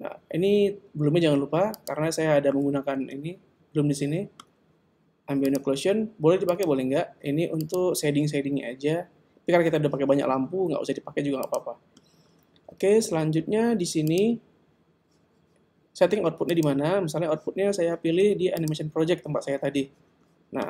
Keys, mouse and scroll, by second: 1.8 click, 5.6 click, 6.5 click, 7.7 click, 11.5 click, 14.1 click, 16.5 click.